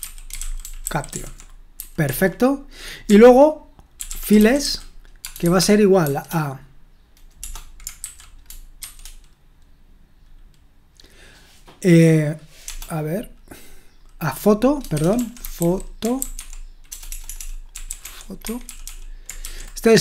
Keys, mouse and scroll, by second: 0.0-9.4 typing, 12.6 BackSpace, 14.9-20.0 typing.